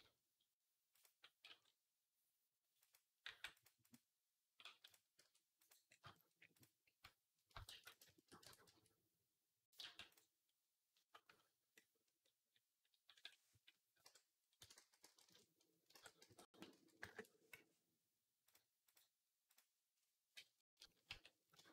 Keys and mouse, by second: 0.8 click, 1.3 g, 3.1 g, 4.5 g, 5.1-7.4 drag, 5.1 r, 7.4 shift+middle click, 7.5 shift+d, 7.8 shift+click, 8.3 Tab, 8.5 a, 9.6 g, 14.6 s, 15.7-18.3 ctrl+middle drag, 15.8 ctrl+z, 16.1 s, 18.3-21.7 drag, 20.4 KP_3, 20.9 a.